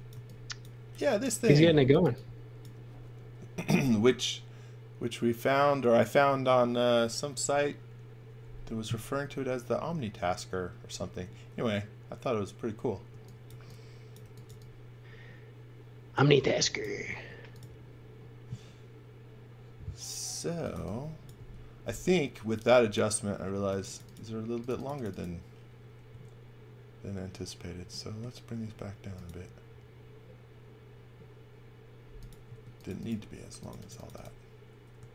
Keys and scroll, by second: 0.1 v, 1.2 x, 2.0 v, 13.0 x, 13.4 v, 14.1 x, 14.4 v, 17.0 space, 20.4 x, 20.7 v, 21.3 space, 26.1 s, 32.4 space, 34.9 s.